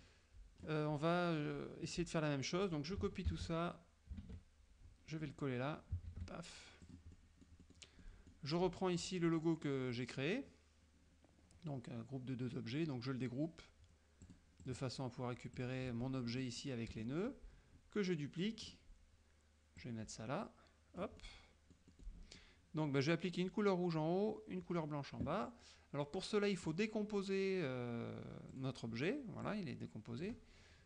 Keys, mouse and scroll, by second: 3.4 ctrl+c, 4.3 alt+Tab, 6.2 ctrl+v, 6.9 click, 7.2 middle click, 9.1 click, 14.4 click, 14.7 click, 15.7 click, 16.4 F2, 17.1 F1, 18.7 click, 19.9-21.2 drag, 21.2-22.3 middle drag, 22.4 middle click, 26.8 click, 28.6 click, 29.5 click, 30.3 click.